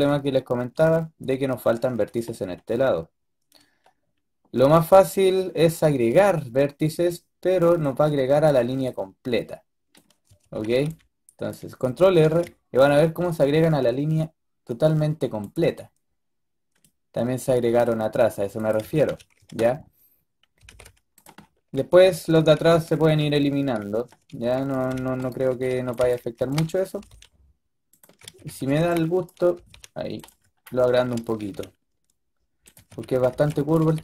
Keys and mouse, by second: 5.3 middle drag, 10.2 a, 10.4 a, 10.6 b, 12.1 ctrl+r, 20.4 g, 21.6 a, 21.9 a, 22.1 a, 24.0-26.8 typing, 25.4 click, 28.1-29.4 typing, 31.2 g, 32.6-33.7 typing.